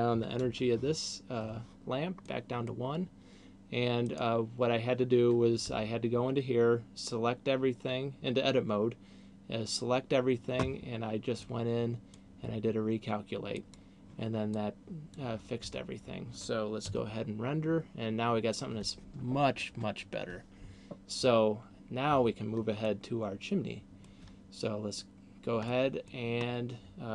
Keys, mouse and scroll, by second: 2.4 middle click, 4.4 right click, 5.9 Tab, 11.9 click, 13.9 click, 14.9 click, 15.9 Tab, 22.4 Escape, 23.4 middle click, 25.9 middle click, 26.6-27.1 scroll down 2.